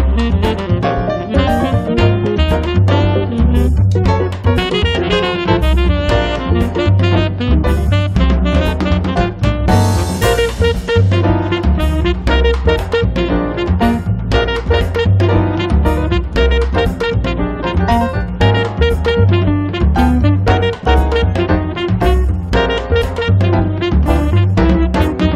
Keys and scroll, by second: 0.0 Return, 0.4 space, 1.3 Escape, 7.0 space, 13.8 space, 18.7 space, 19.9 Escape, 24.0 space.